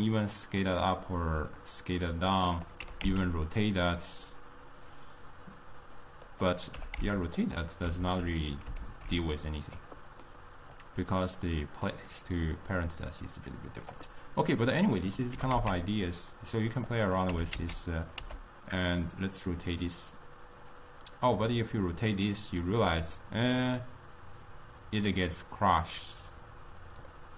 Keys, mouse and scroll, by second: 3.1 r, 6.8 g, 8.1 alt+s, 8.9 alt+g, 9.9-10.8 middle drag, 10.8 click, 12.6 click, 14.6-15.4 middle drag, 15.4 g, 17.3 r, 27.2-27.3 middle drag.